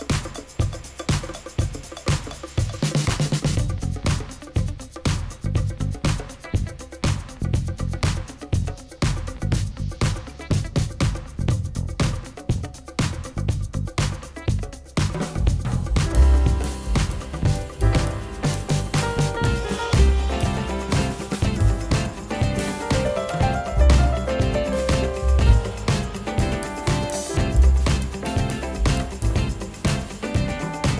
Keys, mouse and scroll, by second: 0.0 Return, 7.8 Return, 24.8 Return, 25.4 shift+click, 27.6 F11, 30.2 F11, 30.3 double click.